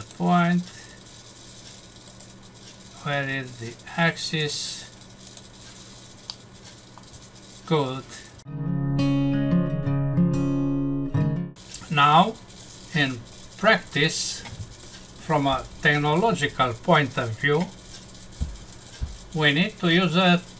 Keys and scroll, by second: 6.3 F6.